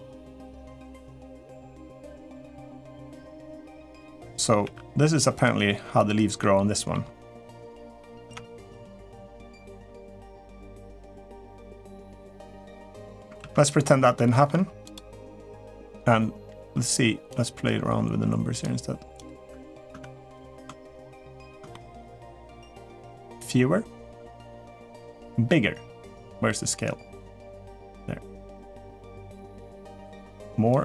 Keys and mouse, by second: 1.3 r, 2.2 g, 3.9 middle click, 4.4 r, 5.3 g, 6.2 middle click, 7.1 click, 8.0 Tab, 8.6-9.7 middle drag, 10.8-11.2 middle drag, 12.0-13.0 drag, 13.2 ctrl+s, 14.1 shift+middle click, 15.1 middle drag, 17.1-18.5 drag, 18.9 click, 19.3 Tab, 19.7 Tab, 20.4-21.3 middle drag, 21.5 shift+middle click, 22.6-24.5 drag, 27.5-29.1 drag, 30.1 click.